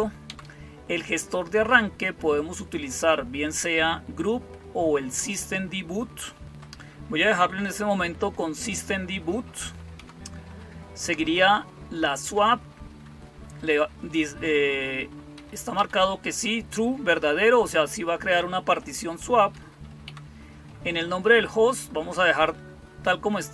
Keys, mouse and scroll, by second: 0.1 Down, 9.8 Down, 15.2 Up, 15.6 Down, 19.9 Down.